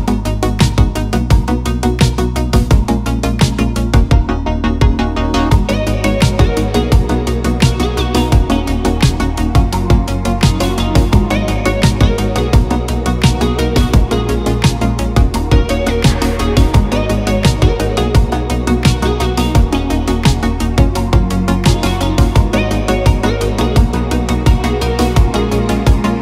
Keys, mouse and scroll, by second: 1.2 KP_1, 2.4 middle click, 3.0 e, 3.3 click, 5.1 middle click, 5.4 middle click, 5.6 Tab, 5.8 middle click, 6.1 middle click, 6.3 middle drag, 6.7 middle click, 6.9 KP_1, 7.1 shift+middle click, 7.5 ctrl+r, 7.9 Tab, 8.2 ctrl+r, 8.9 ctrl+r, 9.7 click, 9.9 ctrl+r, 10.4 click, 10.6 middle click, 11.1 middle click, 11.2 KP_1, 16.1 click, 16.7 click, 18.4 b, 20.7 shift+click, 21.3 click, 23.6 shift+click, 24.4 shift+click, 25.2 click, 25.6-26.2 middle drag.